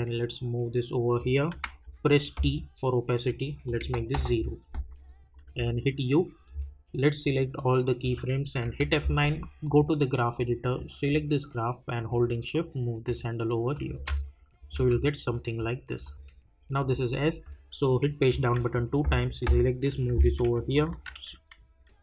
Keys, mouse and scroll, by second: 3.5 t, 3.6 click, 4.1 Return, 5.3 click, 5.5 u, 6.4 scroll down 1, 7.2 click, 8.6 F9, 9.6-13.7 drag, 13.9 space, 15.3 click, 18.3 Page_Down, 19.1 click, 19.9 [, 20.7 click, 20.9 [.